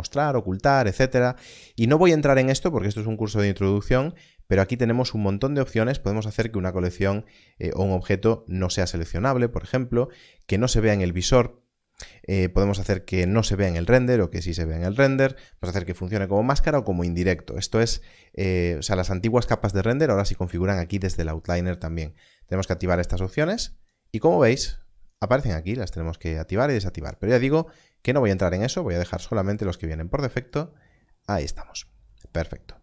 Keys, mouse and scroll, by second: 3.4 click, 22.7 click, 27.1 click.